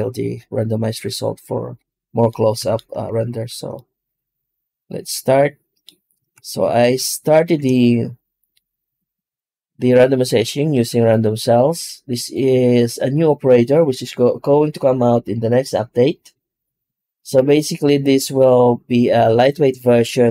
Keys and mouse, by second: 2.5-3.5 ctrl+middle drag, 6.0 Tab, 7.3 shift+q.